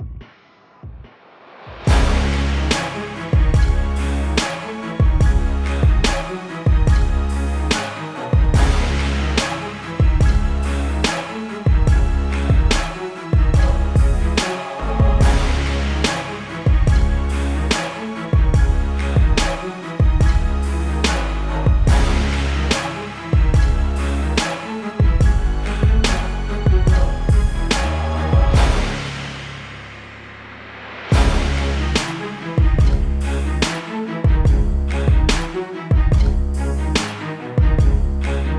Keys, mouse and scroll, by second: 0.3 KP_Enter, 1.4 click, 1.8-2.3 scroll down 1, 2.9 click, 3.4 shift+click, 12.3 click, 18.9 click, 25.3 ctrl+t, 26.3 alt+click, 27.8 KP_Enter, 28.6 ctrl+l, 29.7 click, 33.3 Return, 34.4 click, 36.0 ctrl+t, 36.9 click.